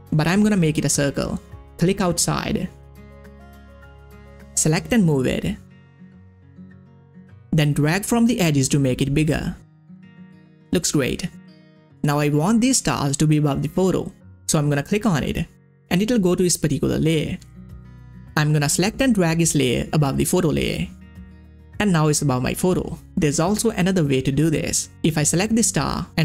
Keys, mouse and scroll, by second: 3.0 click, 3.0-11.4 drag, 11.9 click, 14.7 click, 14.7 click, 17.1 scroll up 1, 18.5 scroll up 1, 18.5 click, 19.6-21.5 scroll up 1, 24.7 click, 25.3 right click.